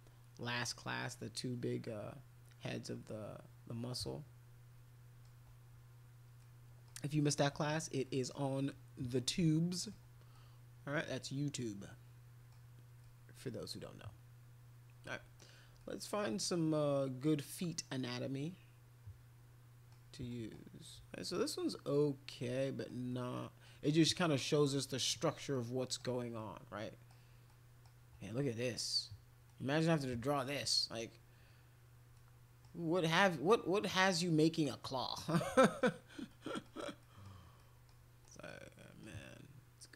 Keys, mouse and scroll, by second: 2.6-5.3 middle drag, 6.4 middle click, 8.0 middle click, 8.6-9.9 middle drag, 10.3 middle click, 11.6 middle click, 13.0-15.3 middle drag, 15.8 middle click, 16.4 middle click, 17.5-19.9 middle drag, 20.3 middle click, 22.5 middle click, 23.1 middle click, 24.1 middle click, 24.8 middle click, 25.5 middle click, 26.4 middle click, 27.5 middle click, 29.5 middle click, 30.3 middle click, 32.1 middle click, 34.1 middle click, 35.0 middle click, 35.6 middle click, 36.3 middle click, 37.0 middle click, 37.6 middle click, 38.2 middle click, 38.8 middle click.